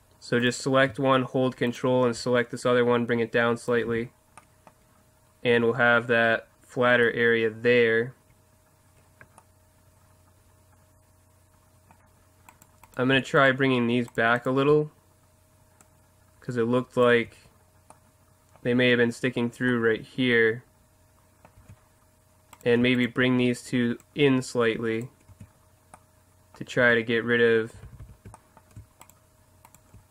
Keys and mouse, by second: 0.4-3.4 right drag, 2.6 click, 3.8 z, 4.8 Tab, 5.5 Tab, 6.4 Tab, 8.1 Tab, 12.5-15.8 right drag, 15.8 middle click, 16.2 click, 17.1 Tab, 20.0-20.5 middle drag, 20.9 middle click, 21.6 Tab, 22.5-24.0 right drag, 24.8 click, 25.3 Tab, 25.4 click, 25.7 middle click, 26.4 middle click, 26.8 Tab, 27.8 ctrl+z, 28.0 ctrl+z, 29.0-30.1 right drag.